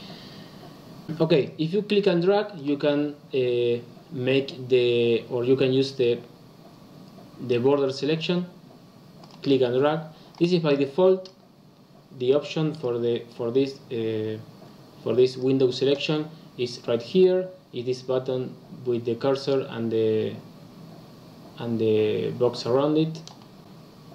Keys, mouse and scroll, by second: 1.3 click, 2.5 click, 9.2 click, 9.4 click, 10.6 click, 11.2 click, 12.6 click, 13.2 click.